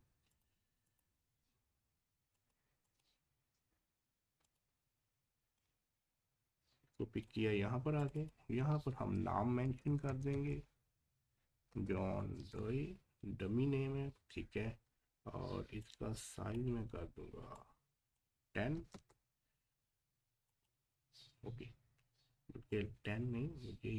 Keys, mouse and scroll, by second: 0.3-8.0 drag, 9.4-12.9 typing, 14.8-16.3 typing, 15.8-20.3 drag, 20.5 click, 22.7-23.9 drag.